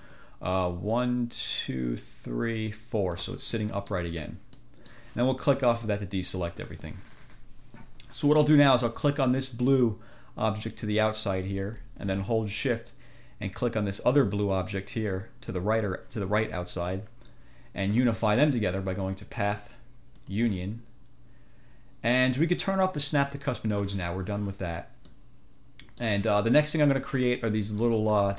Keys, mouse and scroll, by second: 0.1-3.5 drag, 3.7 ctrl+click, 4.7 click, 5.6 click, 10.6 click, 14.5 click, 19.3 click, 20.3 click, 23.3 click, 25.1-26.3 drag, 27.0 click.